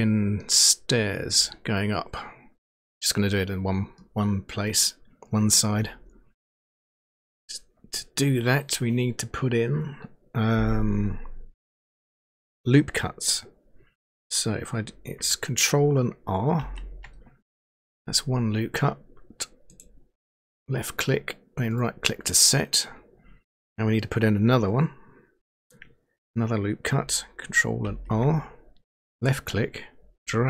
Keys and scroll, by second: 16.6 ctrl+r, 27.8 ctrl+r.